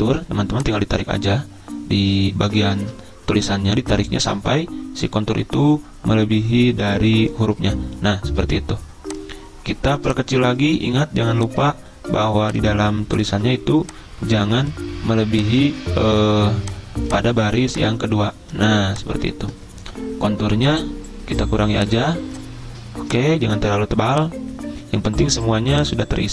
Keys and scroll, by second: 2.8 ctrl+z, 13.3 z.